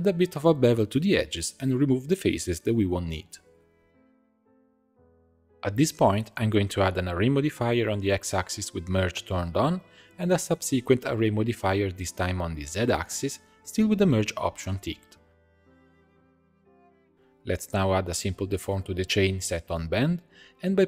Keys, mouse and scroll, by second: 0.1-1.5 drag, 1.5 Tab, 1.7 middle click, 1.9 3, 2.0 click, 2.3 middle click, 2.7 shift+click, 2.9 middle click, 3.4 shift+click, 3.6 middle click, 4.0 shift+click, 4.4 x, 5.2-7.2 drag, 7.9-9.1 drag, 9.1 middle click, 9.2-14.9 drag, 15.6-17.1 drag, 17.1 ctrl+middle click, 17.5-20.1 drag.